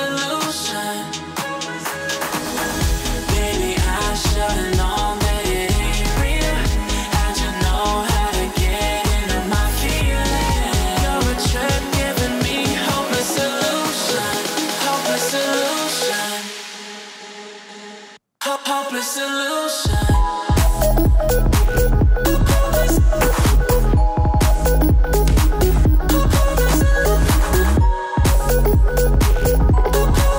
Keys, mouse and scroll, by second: 0.3 scroll up 1, 0.8 click, 5.0-5.7 scroll down 3, 5.7-7.0 alt+scroll up 2, 8.1 click, 13.8 click, 14.2 click, 16.6 click, 27.8 click, 29.7 click.